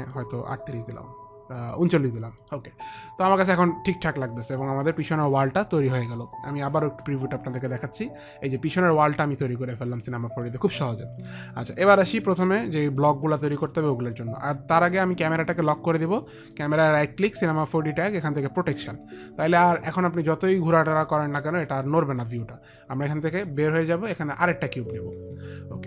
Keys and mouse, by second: 0.3 click, 2.8 click, 7.3 click, 10.8 click, 16.8 right click, 19.0 click, 19.0 right click, 20.9 click, 23.6 click, 25.2 click.